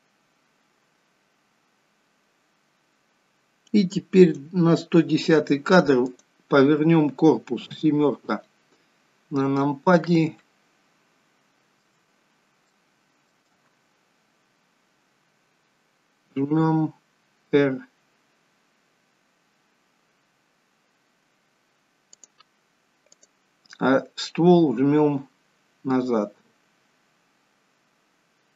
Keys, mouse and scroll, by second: 6.0 click, 7.7 KP_7, 8.7-9.1 scroll down 4, 10.5 shift+middle click, 12.0-12.5 scroll up 6, 12.7 shift+middle click, 14.3-14.9 scroll down 1, 16.3 r, 23.1 click, 24.6 r.